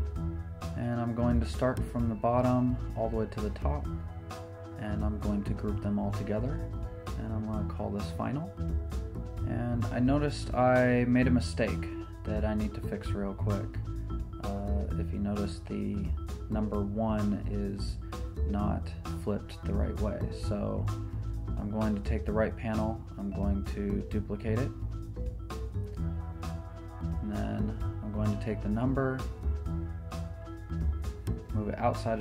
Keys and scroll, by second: 5.9 super+g, 7.3 Return.